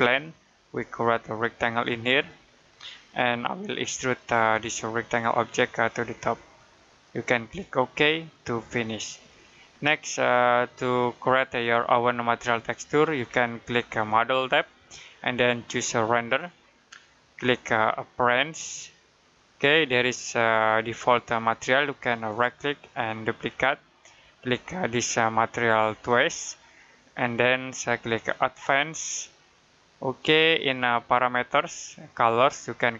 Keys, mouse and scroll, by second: 9.0 middle click, 14.2 click, 22.1 right click, 23.3 click, 25.9 click.